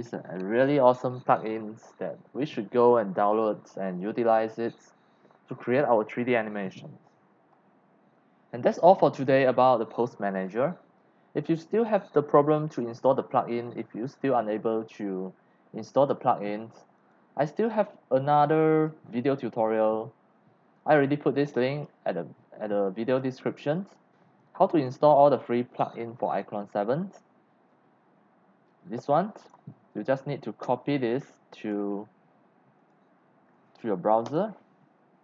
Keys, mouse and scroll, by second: 17.0 click, 18.5 click, 20.8 click, 21.7 click, 23.2 click, 24.2 click, 24.9 click, 25.8 click, 27.7-29.5 drag, 30.6 ctrl+c, 31.6 click, 32.8 click, 34.3 Return, 35.1 middle click, 35.1 scroll.